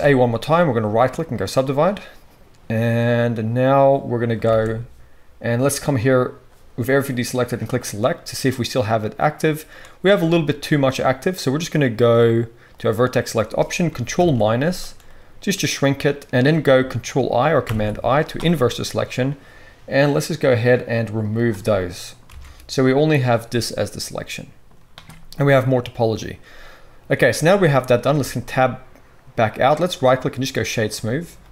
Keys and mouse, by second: 4.5 alt+a, 8.8 middle click, 14.1 ctrl+KP_Subtract, 17.6 ctrl+i, 17.7-20.6 drag, 17.7-20.6 middle drag, 17.7-20.6 right drag, 22.2 alt+a, 28.1 Tab.